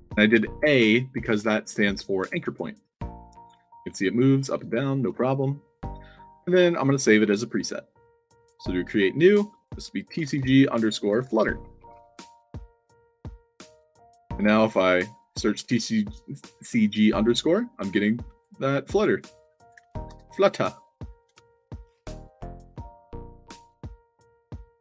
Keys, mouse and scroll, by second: 1.9-2.4 alt+drag, 3.1 click, 3.7 ctrl+z, 4.1 middle click, 4.7 alt+click, 7.4 click, 8.3 click, 9.4 click, 10.2-12.3 typing, 12.6 click, 13.1 click, 17.7 click, 18.2 d, 18.8 click, 19.5 click, 20.9 drag, 21.2 Tab, 22.5-24.6 typing.